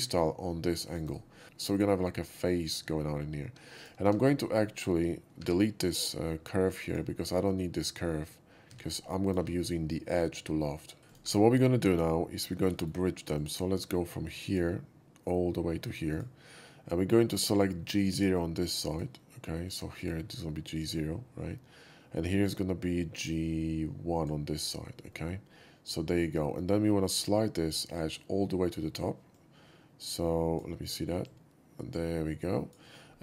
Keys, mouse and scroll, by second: 0.8 click, 1.4 middle click, 1.5 shift+middle drag, 2.1 shift+middle drag, 2.8 shift+middle click, 3.4 2, 3.7 click, 4.0 x, 4.5 middle click, 5.3 2, 5.8 click, 6.8 click, 8.7 x, 9.2 click, 11.0 drag, 11.9 middle click, 11.9 2, 12.7 shift+middle click, 13.3 shift+click, 14.4 shift+drag, 16.1 click, 18.8 click, 19.6 click, 19.9 click, 20.7 click, 24.1 click, 25.0-26.5 middle drag, 29.3-30.5 drag, 31.2-32.7 drag.